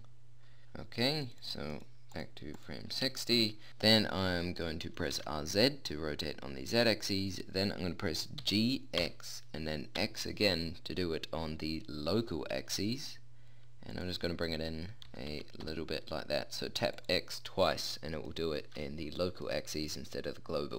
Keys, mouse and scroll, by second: 5.2 r, 6.4 click, 8.4 g, 15.1 g, 18.5-20.3 middle drag.